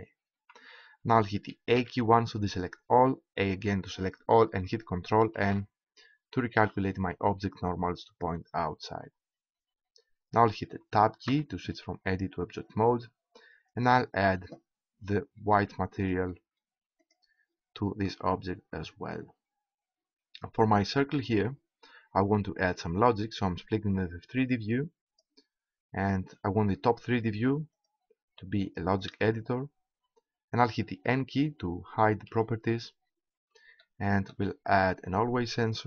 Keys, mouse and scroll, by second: 0.0-1.7 drag, 1.7 a, 3.4 a, 5.4 ctrl+n, 11.3 Tab, 13.7-15.0 drag, 19.1-20.4 middle drag, 23.5-25.2 drag, 29.0 click, 32.3 n, 34.7 click, 35.0 right click.